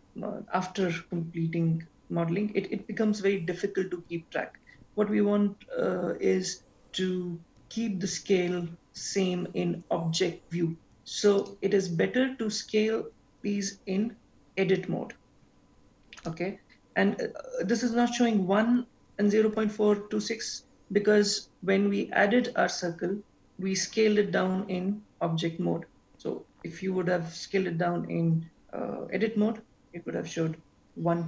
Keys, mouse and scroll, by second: 11.4 click, 16.6 click.